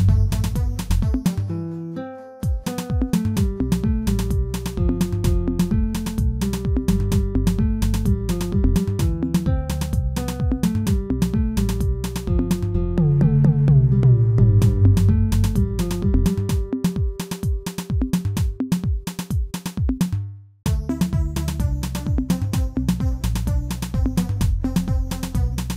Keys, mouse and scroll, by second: 1.3 g, 2.8 alt+click, 4.3 g, 6.6-9.2 middle drag, 9.2 ctrl+r, 11.7 Tab, 12.0 scroll down 1, 12.3 Tab, 13.8 g, 14.8 Tab, 15.3 Tab, 16.4 g, 17.7 Tab, 18.5-19.6 middle drag, 19.6-20.1 scroll down 3, 20.1-23.0 middle drag, 23.5-24.1 middle drag, 24.2-25.3 middle drag, 25.3-25.7 scroll down 2.